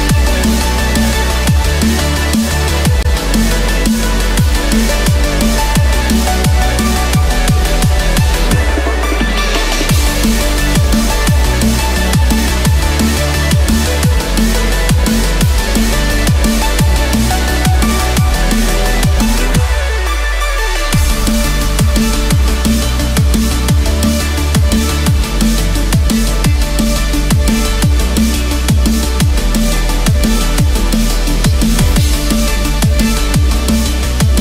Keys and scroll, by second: 17.2 ctrl+z, 25.8 ctrl+=.